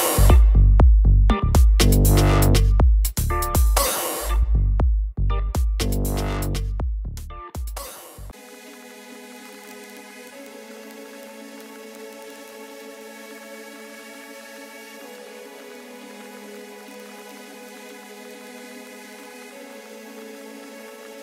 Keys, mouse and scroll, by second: 0.2 ctrl+click, 1.9 click, 4.6 click, 10.7 alt+click, 16.6 Return, 17.6 click.